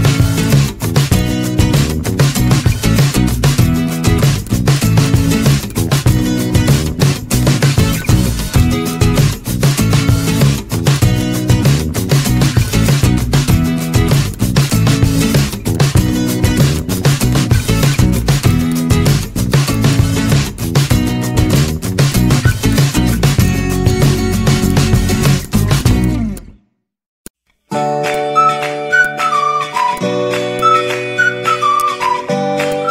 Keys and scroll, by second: 1.4 z, 13.9 c, 20.4 Delete, 21.9 ctrl+z, 24.2 Delete.